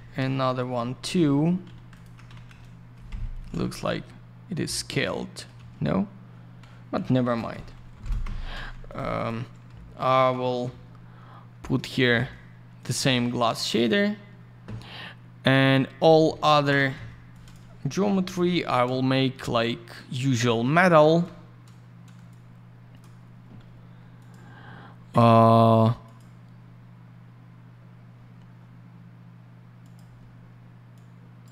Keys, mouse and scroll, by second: 1.9 ctrl+click, 2.0 ctrl+click, 2.2 alt+й, 2.5 alt+middle click, 3.1 F4, 3.6 alt+middle click, 7.0 alt+middle click, 7.5 ctrl+shift+n, 8.2 F4, 8.9 click, 8.9 click, 9.1 click, 9.2 double click, 9.9 ctrl+click, 10.0 ctrl+click, 10.6 б, 11.7 middle click, 11.9 middle click, 12.0 middle click, 12.8 click, 12.8 click, 13.6 click, 13.7 click, 15.4 click, 15.5 click, 15.8-16.2 scroll down 1, 16.2 F4, 16.6 ctrl+space, 16.9 F4, 17.3 click, 17.5 click, 18.3 b, 19.6 middle click, 20.2 scroll down 1, 20.4 middle click, 20.9-21.2 scroll up 1, 22.3 shift+click, 24.2 click, 24.3 click, 25.6 click, 25.7 click, 26.0 click, 26.1 click, 29.8 click, 29.9 click, 30.9 click.